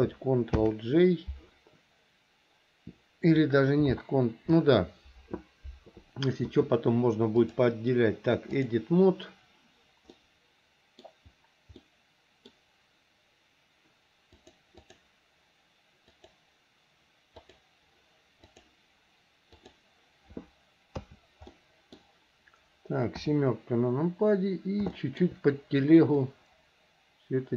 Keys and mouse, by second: 0.7 ctrl+j, 7.6-8.9 drag, 10.3 middle click, 12.1 middle click, 14.6 click, 16.3 click, 17.6 click, 18.7-19.9 drag, 21.1 a, 21.6 middle click, 23.3 KP_7, 25.1 shift+middle click, 26.3 click, 26.5-27.5 drag.